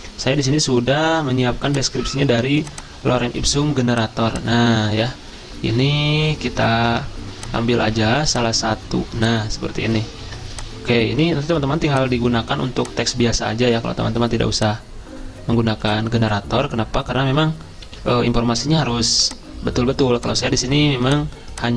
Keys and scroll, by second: 1.1 super+m, 5.1 alt+Tab, 6.5 alt+Tab, 6.9 alt+Tab, 10.3 ctrl+c, 11.5 ctrl+v, 17.9 ctrl+e.